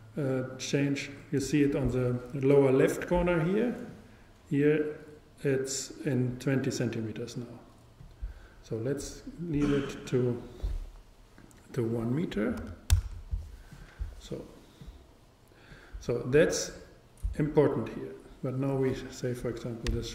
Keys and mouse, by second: 3.9-5.9 drag, 9.6-11.5 drag, 11.9-16.7 drag.